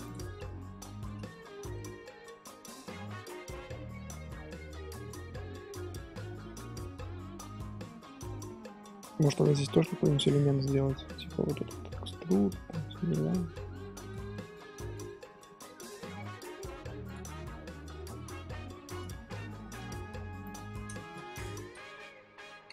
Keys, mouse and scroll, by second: 0.0 click, 0.7 shift+h, 1.0-3.3 middle drag, 3.3 Tab, 3.6-4.1 middle drag, 4.1 Tab, 4.5-5.7 middle drag, 5.7 Tab, 6.3-9.6 middle drag, 9.6 s, 14.3 middle click, 14.8 ctrl+z, 15.0 shift+middle click, 15.8 e, 17.2-18.4 middle drag, 18.4 s, 19.6-20.4 scroll down 1, 20.4 alt+shift+click, 21.0 ctrl+z, 21.3 alt+shift+click, 22.1 scroll up 2, 22.6 ctrl+b.